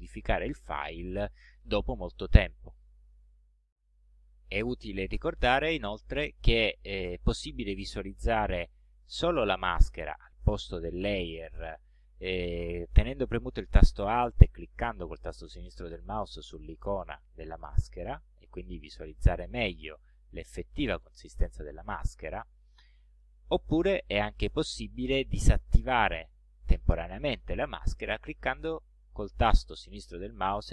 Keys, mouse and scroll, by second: 16.6 alt+click, 18.3 click, 19.1 ctrl+scroll up 2, 20.4 ctrl+scroll up 2, 20.9-21.6 ctrl+scroll down 4.